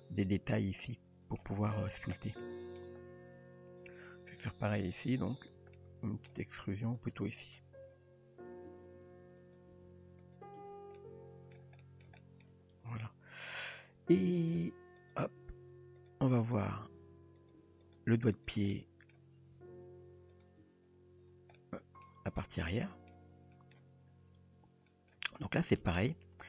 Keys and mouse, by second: 0.2 Tab, 0.9-1.4 middle drag, 2.4-2.8 middle drag, 3.4 Tab, 5.0 click, 5.5 click, 5.8 middle click, 7.0 click, 8.8 e, 9.7 s, 10.6 Tab, 11.0-11.5 middle drag, 11.8 middle drag, 12.2 shift+middle drag, 12.8 Tab, 14.4 click, 15.1 click, 15.4 g, 16.5 click, 17.0 r, 17.6 g, 18.7-19.1 middle drag, 19.6 r, 20.7 Tab, 21.6-22.0 middle drag, 22.7-23.1 middle drag, 23.5 middle click, 24.2 Tab, 24.9 shift+middle drag, 25.8 KP_3.